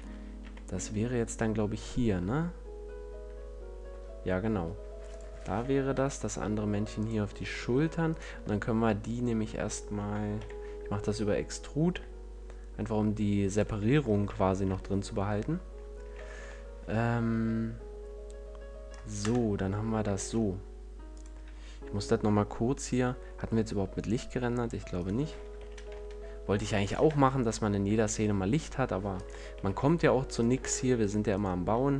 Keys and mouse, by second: 5.1-6.9 drag, 5.4 shift+d, 6.9 middle click, 7.0-8.1 drag, 8.1-9.7 middle drag, 8.3 Tab, 10.1 e, 13.5-16.0 drag, 13.7 a, 14.2 Tab, 16.0 z, 19.1 KP_0, 20.1 shift+f, 23.9-28.7 drag, 24.9 right click, 25.5 g, 26.9 shift+f, 29.2-31.3 drag, 29.5 g, 30.5 shift+f, 31.4 click.